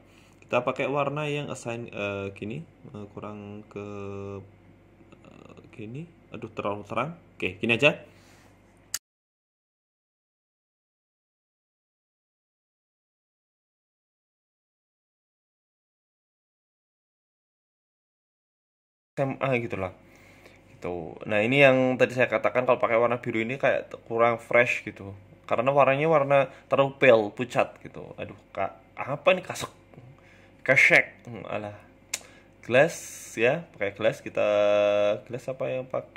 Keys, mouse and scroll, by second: 0.6 Tab, 1.2 middle click, 1.7-2.2 scroll down 2, 2.2 click, 3.2 click, 6.3 middle click, 6.6-7.7 scroll down 5, 6.8 middle click, 7.5 scroll up 1, 8.0 right click, 8.0 scroll up 2, 8.6 click, 9.0 click, 11.2 click, 14.9 middle click, 15.4 shift+middle click, 16.0 scroll up 1, 16.2 shift+middle click, 16.6 Tab, 17.8 click, 18.0 scroll up 2, 18.4 shift+middle click, 19.1 right click, 19.8 alt+shift+right click, 20.6 shift+middle click, 21.2 shift+right click, 23.1 scroll up 2, 23.4 click, 24.3 click, 24.6 click, 27.3 click, 28.4 BackSpace, 30.2 click, 31.6-32.1 scroll down 2, 32.1 scroll down 1, 34.1 click.